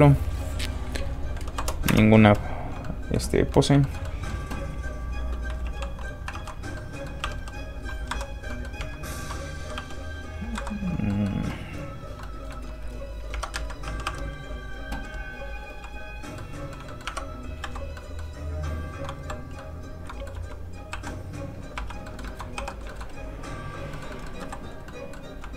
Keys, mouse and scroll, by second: 1.6 KP_0, 1.9 Return, 2.8 middle click, 3.5 click, 3.8 shift+middle click, 4.0 middle click, 4.1 middle click, 5.6 alt+g, 6.3 alt+r, 6.8 r, 6.9 middle click, 7.2 r, 8.1 Escape, 8.5 middle click, 8.8 Tab, 9.6 r, 10.5 Escape, 11.1 middle click, 12.4 shift+middle click, 13.3 shift+Tab, 13.5 a, 13.8 r, 14.7 click, 15.0 r, 15.5 click, 15.7 g, 16.0 click, 16.4 middle click, 17.1 Tab, 17.6 x, 17.7 click, 18.0 middle click, 18.6 click, 19.2 x, 19.3 click, 19.6 middle click, 20.3 1, 20.9 2, 21.2-21.7 scroll down 1, 21.7 1, 22.1 middle click, 22.3 shift+middle click, 22.6 shift+3, 22.9 shift+middle click, 23.3 click, 23.9 middle click, 24.1 shift+middle click, 24.5 shift+x, 24.5 click, 24.9 middle click, 25.4 1.